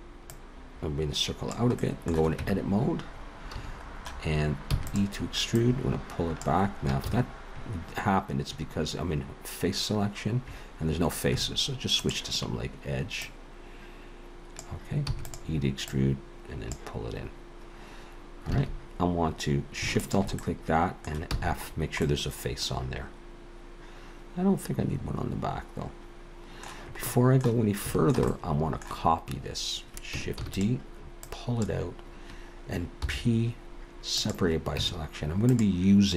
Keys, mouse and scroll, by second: 0.3 click, 1.8 middle click, 2.4 Tab, 3.6 a, 4.7 e, 5.6 click, 7.0 ctrl+z, 12.0 click, 13.2 click, 15.1 e, 15.9 click, 18.6 alt+a, 20.0 alt+shift+click, 20.4 middle click, 21.3 f, 21.7-22.0 scroll down 2, 22.0 middle click, 24.7 middle click, 27.1 middle click, 27.7 scroll up 2, 27.9 shift+middle click, 28.3 middle click, 30.4 shift+d, 31.2 click, 33.0 p, 34.8 Tab, 35.5 click.